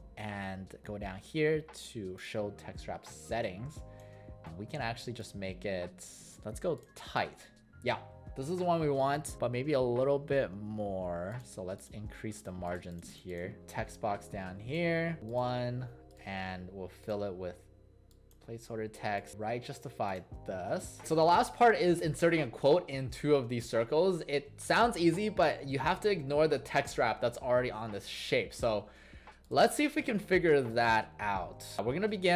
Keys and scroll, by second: 19.3 ctrl+a, 31.5 ctrl+shift+w.